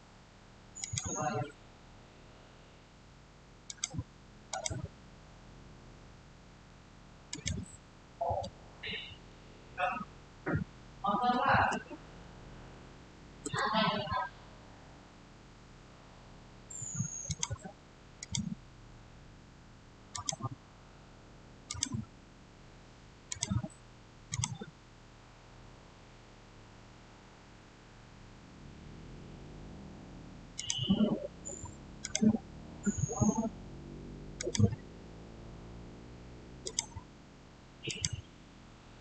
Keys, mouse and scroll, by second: 3.5 click, 7.2 click, 12.1-13.0 typing, 12.3 click, 13.3 Return, 17.2 click, 22.1 click, 26.7-28.4 scroll up 1, 30.4 click, 34.2 click, 36.5 click.